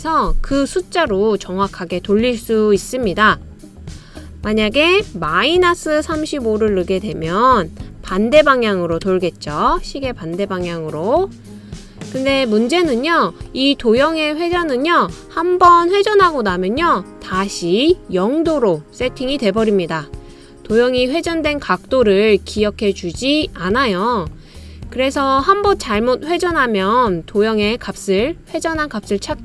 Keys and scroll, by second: 0.0-0.5 typing, 5.3 Left, 5.9 -, 6.5 3, 6.8 5, 7.8 Right, 8.0 Right, 8.8-9.7 typing, 9.7 Return.